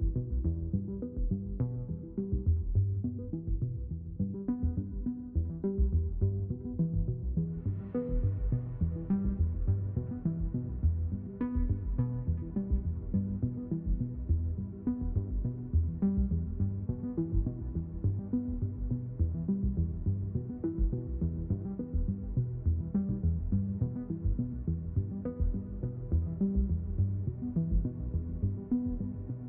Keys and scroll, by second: 2.1 ctrl+z, 4.9 ctrl+z, 6.2 ctrl+z.